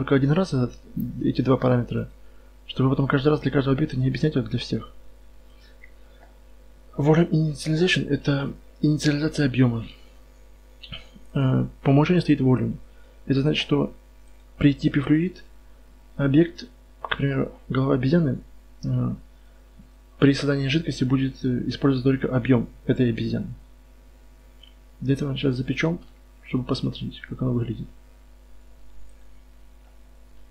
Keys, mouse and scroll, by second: 9.1 KP_4, 9.1 KP_1, 9.6 KP_1, 10.0 KP_Decimal, 15.1-25.1 drag, 25.7-29.3 right drag, 26.2 drag, 26.4-28.5 middle drag, 28.5-30.5 drag.